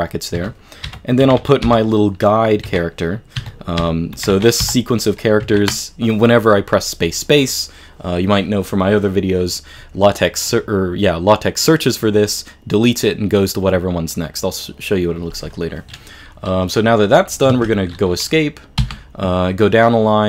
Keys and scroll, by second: 0.4-5.4 typing, 17.5 Escape, 18.8 j.